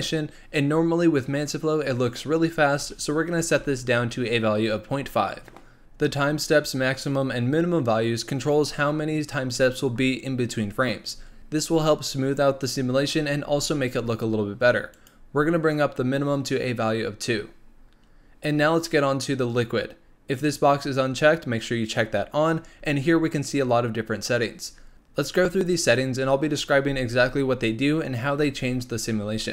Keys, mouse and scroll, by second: 18.0-19.4 scroll down 3, 19.4-20.3 scroll down 4, 20.3 click, 22.6-24.7 scroll down 3, 24.7 scroll up 2.